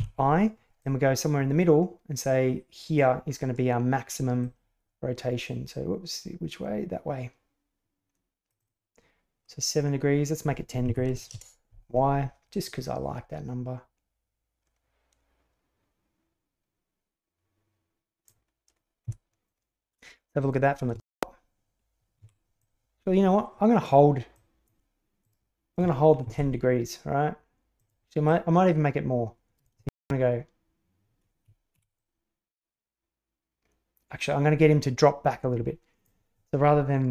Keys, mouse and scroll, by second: 0.7-3.0 drag, 4.4-8.4 drag, 8.5-11.6 drag, 12.6-18.2 drag, 18.9 KP_7, 20.3 click, 20.9 shift+space, 22.2 Escape, 22.5-23.8 drag, 24.3 click, 25.1 click, 26.1 shift+d, 28.2-29.6 drag, 29.7 shift+space, 31.7 Escape, 31.9-36.0 drag, 37.0 r.